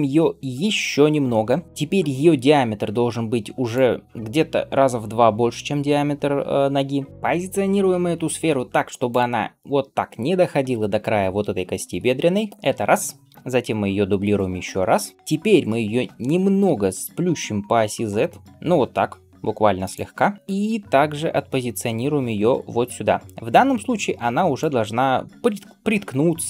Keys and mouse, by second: 0.9 s, 11.9 g, 14.5 shift+d, 16.5 s, 20.4 g.